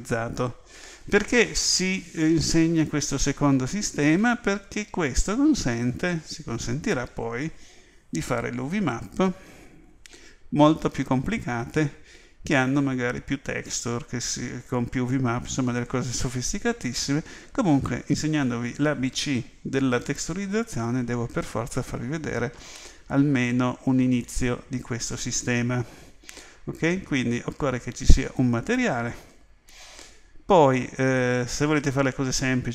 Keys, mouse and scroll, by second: 24.3 click, 28.3 click.